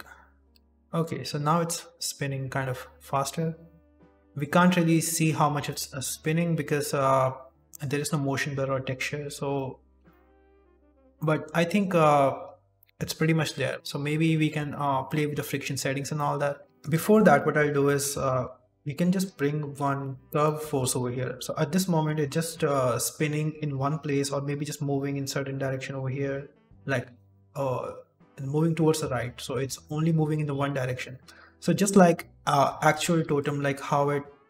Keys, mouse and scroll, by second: 0.6 click, 0.6 shift+middle click, 0.6 shift+space, 0.8 shift+middle click, 2.2-3.2 scroll down 6, 5.3-5.6 scroll down 4, 5.6 middle click, 9.5 middle click, 10.0 shift+middle click, 11.1 middle click, 13.4 middle click, 13.7 click, 13.7 shift+middle click, 13.7 shift+space, 13.8 ctrl+s, 14.3 middle click, 14.7 right click, 15.0 shift+middle click, 16.1 middle click, 16.6 click, 16.6 shift+middle click, 17.0 KP_7, 17.8 shift+middle click, 18.1 shift+a, 19.9 scroll down 3, 20.4 shift+middle click, 20.7 scroll up 1, 21.5 click, 22.4 shift+space, 22.8-23.1 scroll down 2, 23.4 scroll up 2, 28.9 shift+space, 29.4 shift+middle click, 30.5 scroll up 1, 31.0 shift+middle click, 33.2 d, 33.3 click.